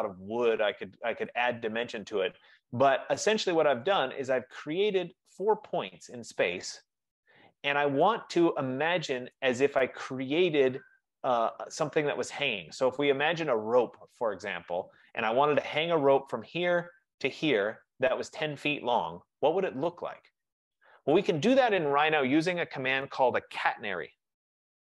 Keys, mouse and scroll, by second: 0.2 middle click, 1.5 right click, 3.6 right click, 4.7 right click, 7.7 F15, 9.5 right click, 14.4 middle click, 14.6 middle click, 14.8 middle click, 16.3 click, 18.0 click, 21.2 click, 24.4-24.8 typing.